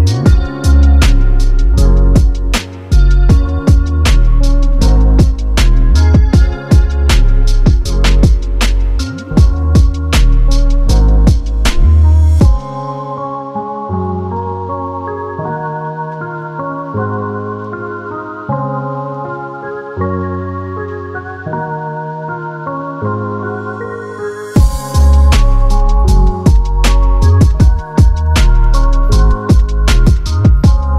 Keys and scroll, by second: 1.1 typing, 8.3 g, 19.2-19.9 typing, 20.9 g, 26.9 z, 30.3 g.